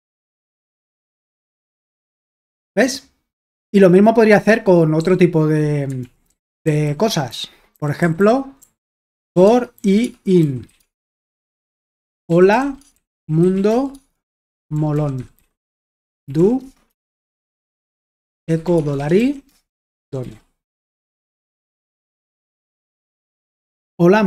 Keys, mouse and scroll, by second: 0.0-1.3 typing, 0.5 super+h, 1.1 ctrl+p, 1.6 Return, 5.0 k, 6.0 super+l, 6.3-22.0 typing, 22.2 super+h, 23.7-24.2 typing.